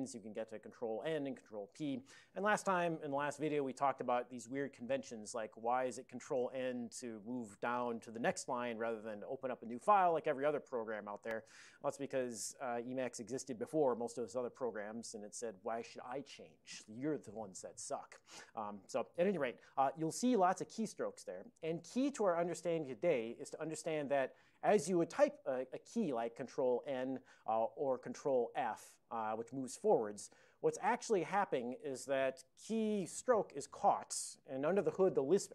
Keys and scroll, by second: 0.2 ctrl+n, 1.4 ctrl+p, 1.6 ctrl+p, 1.8 ctrl+p, 26.6 ctrl+n, 27.0 ctrl+n, 28.4 ctrl+f, 28.7 ctrl+f, 28.9 ctrl+f.